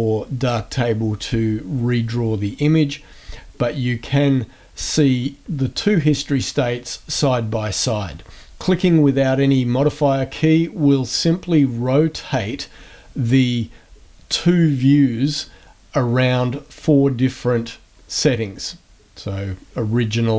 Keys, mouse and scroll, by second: 3.3 a, 3.6-4.8 drag, 10.2 click, 18.0 click.